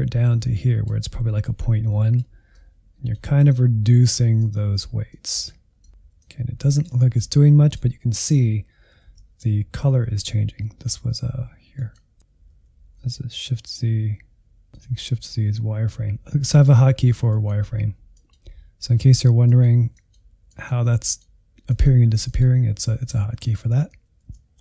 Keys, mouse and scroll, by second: 6.0-7.2 middle drag, 7.2-9.5 drag, 9.5 shift+z, 10.4 shift+z, 11.8-12.9 drag, 12.9 shift+z, 13.0 shift+z, 13.6-22.7 drag, 22.7-23.8 middle drag, 23.8 shift+z, 24.1 shift+z.